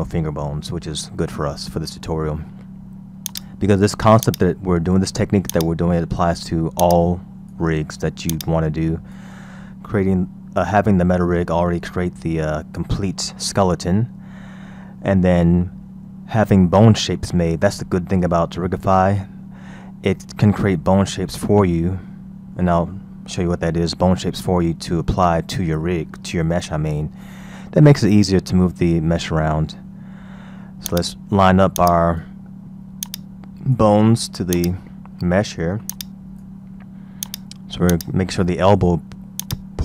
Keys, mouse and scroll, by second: 3.3 click, 4.2-11.4 drag, 12.2-13.8 scroll down 3, 13.8-14.6 scroll up 4, 14.6 scroll up 2, 17.9-19.3 scroll down 1, 19.3-20.0 scroll down 2, 20.0-23.0 scroll up 2, 27.2-29.5 scroll down 3, 29.5-29.8 scroll down 1, 29.8-30.2 scroll up 4, 30.9 click, 31.8 click, 33.1 click, 34.6 click, 36.0-37.4 drag, 37.9-39.8 drag.